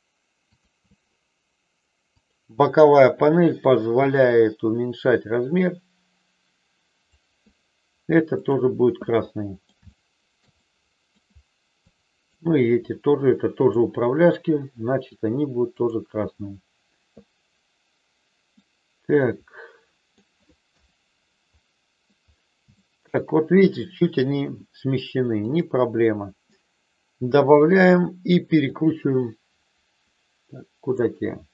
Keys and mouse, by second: 0.4 click, 2.2 click, 3.6-7.0 drag, 8.3 click, 9.0 middle click, 9.8 shift+middle click, 10.5 middle click, 11.8 click, 13.5 click, 15.8 click, 18.5-20.0 middle drag, 20.6 KP_1, 22.8 shift+middle click, 25.4 click, 28.6-31.0 drag.